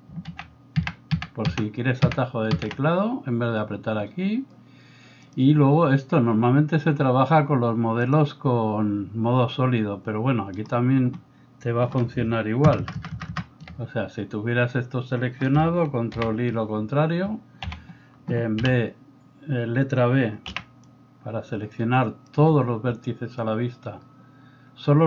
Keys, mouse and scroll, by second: 0.3 alt+z, 0.9 alt+z, 1.1 alt+z, 1.5 alt+z, 2.1 alt+z, 2.5 alt+z, 6.0-10.6 middle drag, 8.5 click, 10.6-12.2 right drag, 12.2-25.0 ctrl+middle drag, 12.8 ctrl+KP_Add, 13.0 ctrl+KP_Add, 13.3 ctrl+KP_Add, 16.2 ctrl+i, 17.7 a, 18.7 b, 20.5 b.